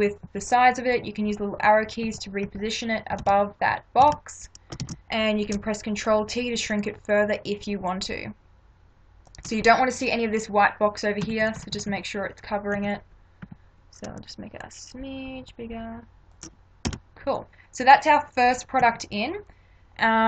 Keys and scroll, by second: 1.3 Right, 3.2 ctrl+=, 4.8 ctrl+t, 11.3 Left, 12.8 Right, 16.9 Return, 18.8 Right.